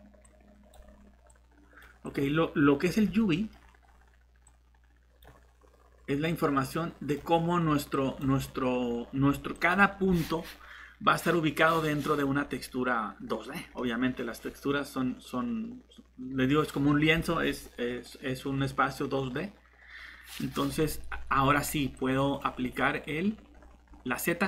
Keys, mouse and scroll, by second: 2.8-3.3 scroll up 1, 3.3 middle click, 3.5-4.4 scroll up 1, 4.4 click, 8.3 scroll down 1, 9.5 click, 12.4-13.7 scroll up 1, 13.7 middle click, 22.0 click, 23.5 scroll down 1, 23.8 scroll up 1.